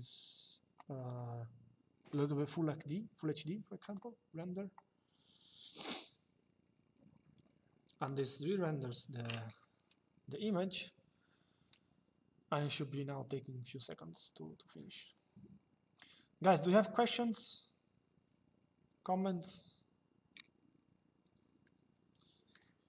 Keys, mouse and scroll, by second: 1.9 click, 3.5 click, 7.7 click.